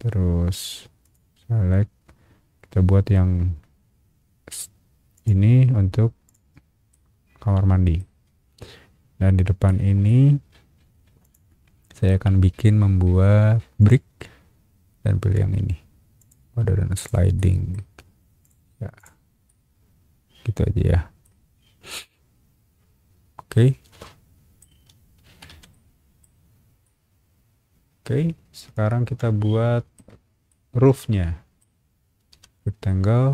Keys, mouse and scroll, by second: 1.0 click, 5.1 click, 6.2 click, 6.9-7.9 middle drag, 8.2-8.7 scroll down 2, 9.0-9.5 scroll up 4, 9.6 middle click, 11.2 click, 11.8 scroll up 1, 13.8 click, 16.2 click, 17.0 click, 17.3 middle click, 17.9 scroll up 1, 18.4 click, 19.0 click, 19.4-21.2 middle drag, 21.5 scroll down 1, 21.9-24.6 middle drag, 24.8 space, 25.3 Escape, 25.7 middle click, 26.8-29.9 middle drag, 30.5-31.6 shift+middle drag, 32.3 r.